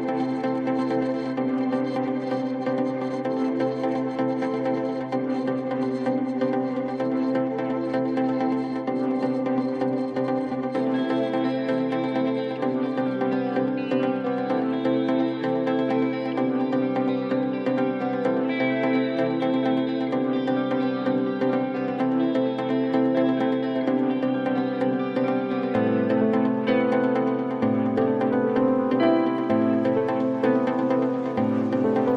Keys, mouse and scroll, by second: 0.0-1.5 typing, 4.3 click, 5.8 click, 7.6-9.2 typing, 8.7 click, 10.3-11.6 typing, 13.1-14.5 drag, 15.0 click, 16.7-17.6 typing, 18.9-20.9 typing, 22.1 Return, 24.2 Return, 24.7 click, 25.6-28.8 typing, 31.2 Return.